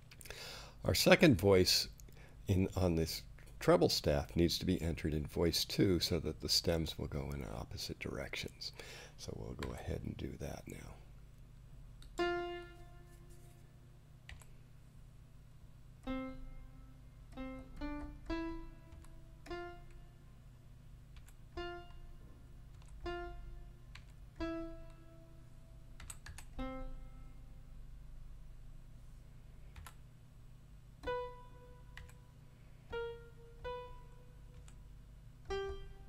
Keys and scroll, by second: 9.6 5, 14.3 4, 18.9 5, 21.1 4, 22.7 5, 23.9 4, 26.0 5, 26.2 ., 29.7 5, 32.0 4, 34.5 5.